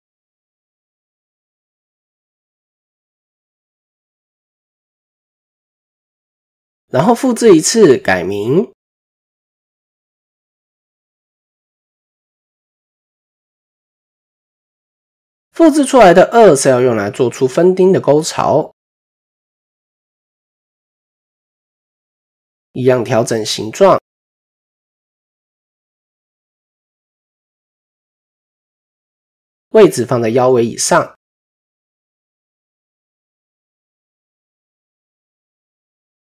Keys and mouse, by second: 0.6 s, 3.8 KP_7, 4.7 shift+middle click, 5.4 Tab, 6.4 shift+d, 10.6-12.0 drag, 13.3 click, 13.5-14.6 drag, 19.1 Tab, 20.7 KP_1, 22.1 s, 26.7-29.2 drag, 31.4 KP_7, 33.8 s.